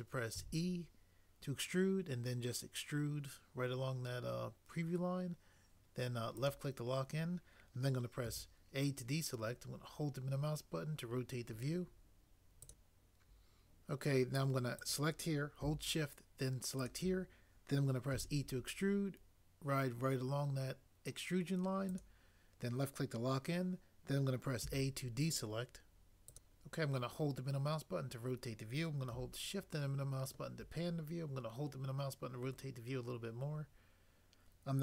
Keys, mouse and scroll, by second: 0.5 e, 8.2 a, 12.7 click, 16.7 click, 18.1 e, 22.0 click, 24.6 a, 26.3 click.